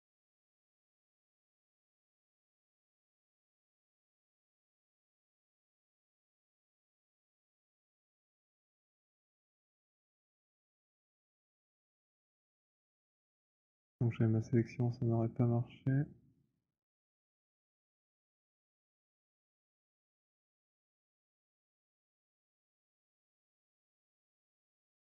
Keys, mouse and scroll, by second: 2.2 alt+click, 3.0 alt+click, 3.0 alt+right click, 4.8 click, 6.6 b, 8.0 w, 8.9 click, 11.1 right click, 11.8 click, 12.4 click, 13.8 click, 16.6 click, 17.8 click, 18.4 click, 19.2 click, 19.9 click, 20.4 click, 21.7 click, 22.4 click, 23.2 click, 23.7 click, 24.4 click, 24.9 click.